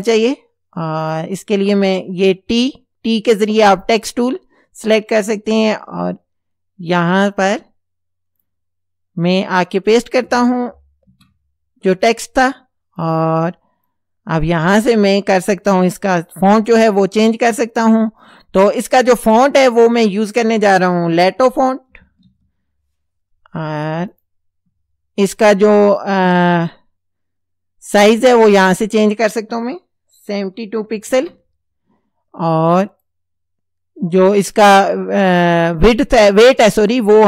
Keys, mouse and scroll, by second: 0.1 click, 1.1 click, 1.8 click, 7.0 click, 8.4 click, 11.1 ctrl+v, 12.4 click, 13.0 click, 13.9 click, 16.6 click, 21.7-23.1 typing, 24.1 click, 28.1 click, 30.5 KP_7, 30.8 KP_2, 31.1 KP_Enter, 32.9 click, 35.3 click, 36.7 click.